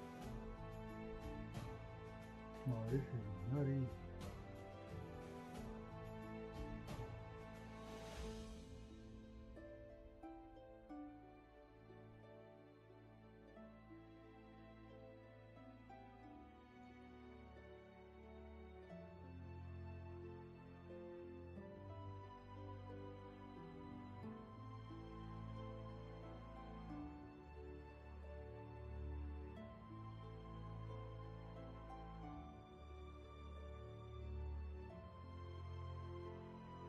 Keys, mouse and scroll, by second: 19.2 ctrl+z, 20.9 ctrl+z, 24.2 ctrl+z, 29.1 ctrl+z, 31.2 ctrl+z, 35.1 ctrl+z.